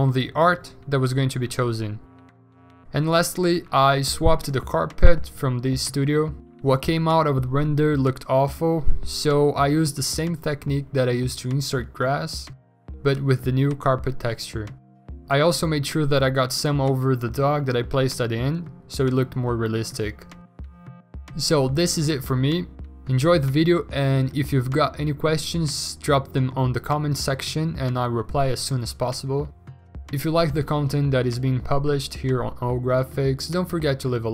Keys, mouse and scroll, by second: 2.7 b, 5.7 b, 8.6 ctrl+d, 11.2 v, 11.7 ctrl+a, 12.3 ctrl+d, 12.5 m, 13.0 Delete, 13.2 ctrl+d, 13.2 v, 14.1 ctrl+u, 15.6 alt+Tab, 15.6 ctrl+v, 15.9 ctrl+t, 16.5 v, 16.7 ctrl+t, 20.8 w, 21.4 ctrl+d, 22.6 ctrl+d, 23.8 i, 27.1 alt+BackSpace, 27.2 ctrl+d, 27.8 v.